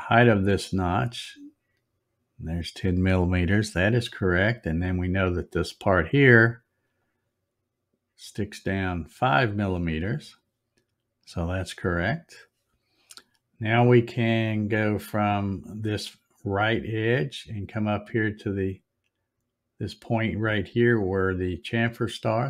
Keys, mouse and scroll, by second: 0.2 click, 2.4 click, 5.2 click, 7.0 click, 9.8 click, 16.5 click, 21.3 click.